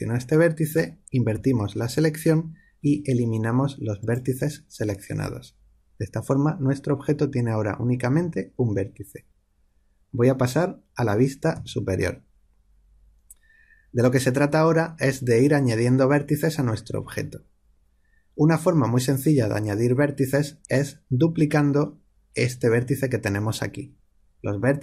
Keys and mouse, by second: 1.3 ctrl+i, 2.8 x, 11.5 KP_7.